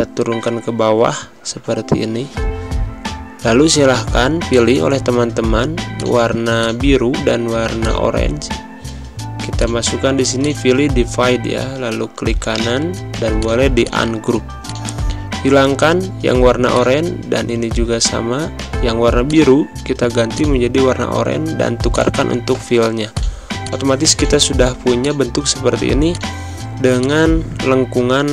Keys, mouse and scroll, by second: 0.9 Right, 1.4 Left, 4.4 click, 12.4 right click, 13.3 click, 15.9 Delete, 16.6 click, 17.0 Delete, 19.1 click, 24.6 z, 24.9-26.8 drag, 26.8 space, 26.9 click, 27.2 space.